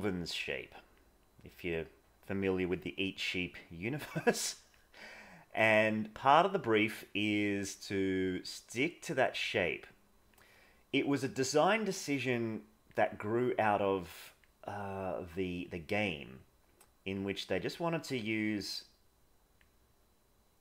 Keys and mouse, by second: 0.2 click, 1.2 click, 2.3 click, 3.3 click, 4.3 click, 5.3 click, 6.3 click, 6.9 click, 8.3 click, 9.7 click, 11.3 click, 12.3 click, 13.5 click, 15.4 click, 16.3 click, 17.6 click, 18.3 click, 20.4 click.